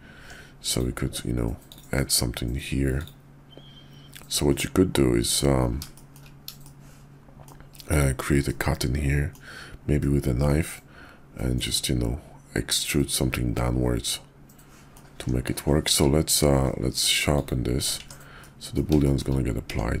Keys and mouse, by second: 0.1 Tab, 0.6 click, 1.0 Tab, 1.6 click, 2.9 click, 4.2-5.4 middle drag, 5.9 shift+middle click, 6.6 shift+middle click, 7.8 click, 8.4 middle click, 9.9 middle click, 11.5-14.9 middle drag, 15.1 Tab, 15.8 q, 18.0 Tab, 18.4 click, 18.9 shift+click, 19.6 Tab.